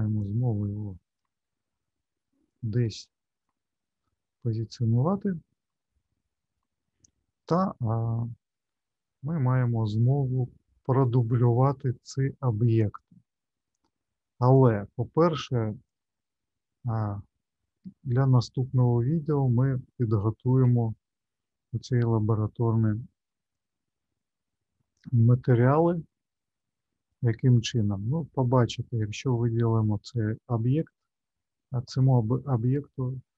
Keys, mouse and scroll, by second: 0.2 click, 2.4 click, 4.1 middle click, 6.1 middle click, 14.5 click, 15.8 click, 18.8 click, 20.6 n, 22.2 middle click, 24.2-25.2 scroll up 1, 25.2 middle click, 26.3 shift+middle click, 27.5 middle click, 28.7 click.